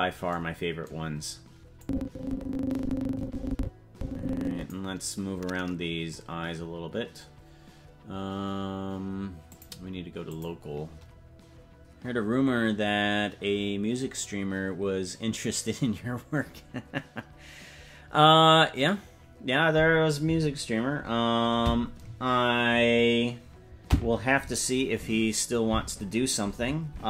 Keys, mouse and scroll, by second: 1.2-1.8 scroll down 4, 1.8-4.7 drag, 9.5-10.7 drag.